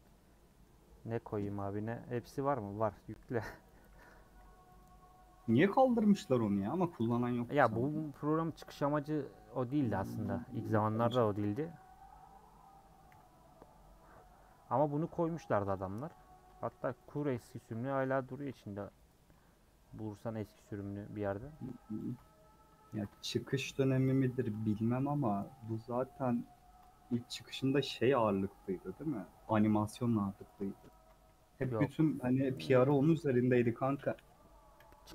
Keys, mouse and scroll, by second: 0.1 u, 0.4 middle click, 0.7-1.3 scroll up 1, 1.3 click, 2.0 middle click, 2.4-3.3 scroll down 1, 3.3 ctrl+click, 3.8 a, 4.8 u, 5.1 scroll down 1, 5.3 scroll up 1, 5.7-6.4 scroll down 5, 6.4 middle click, 6.9 scroll down 1, 7.2-10.6 middle drag, 10.6 /, 11.1 scroll down 2, 11.4 Tab, 13.0 h, 15.7 click, 16.0 /, 16.4 Tab, 16.7 3, 17.0 click, 17.6 ctrl+click, 18.7 ;, 19.5-19.9 scroll up 1, 19.9 middle click, 20.2 scroll up 1, 20.5 middle click, 20.7 3, 21.3 click, 21.4 scroll up 1, 21.5 middle click, 22.0-23.1 ctrl+drag, 24.0 ;, 24.6-26.0 middle drag, 26.0 click, 26.4 click, 27.4 scroll down 1, 27.7 a, 28.4 u, 29.1-30.5 middle drag, 30.5 click, 30.9 a, 31.8 u, 32.8 /, 33.1 middle click, 33.4 Tab, 33.6 h, 34.0 click, 34.7 /, 34.9 middle click.